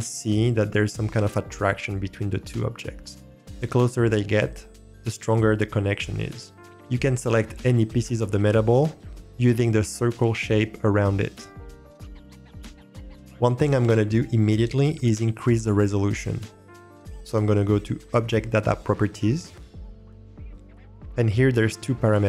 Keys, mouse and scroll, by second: 12.0-12.8 drag, 12.8 middle click, 19.6-21.0 drag.